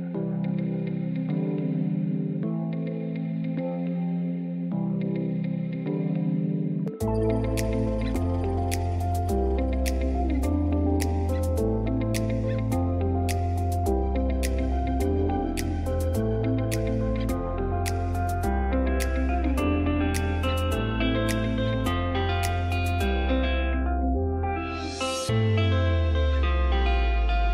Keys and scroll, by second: 1.2 F2, 5.5 F3, 9.5 F2, 10.3 ctrl+r, 11.1 F3, 11.8 Delete, 12.6 ctrl+z, 13.1 F3, 15.6 Escape, 17.6 ctrl+r, 17.9 Escape, 19.3 ctrl+r, 19.7 Escape, 20.0 F2, 21.4 F3, 26.2 space, 26.7 F3, 27.0 Escape, 27.2 F2.